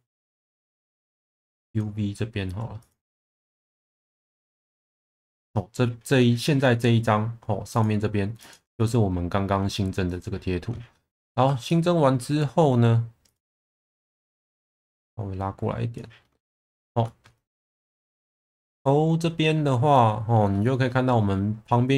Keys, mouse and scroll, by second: 11.7-14.4 shift+middle drag, 14.4-16.2 drag, 16.5 shift+middle click.